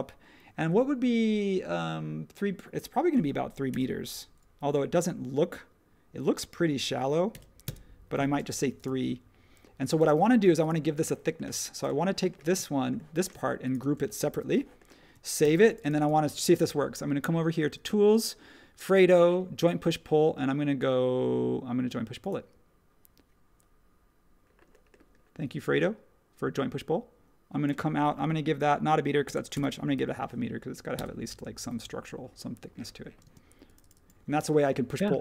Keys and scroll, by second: 3.7 3, 7.3 3, 7.6 Return, 8.3 space, 14.3 super+g, 15.4 super+s, 29.0-30.0 typing, 30.9 Return, 33.2 space.